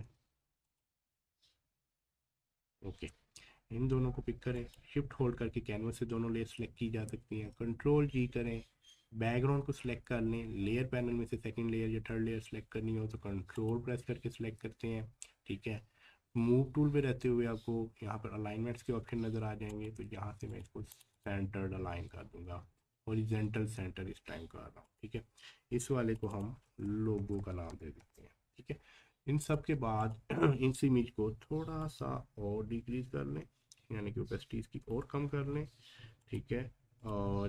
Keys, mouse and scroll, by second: 3.6 click, 7.4 ctrl+g, 13.6 ctrl+click, 22.2-22.8 scroll down 1, 24.8 click, 26.9-28.0 typing, 29.4-35.2 drag, 35.2-36.2 scroll up 1, 36.2 click.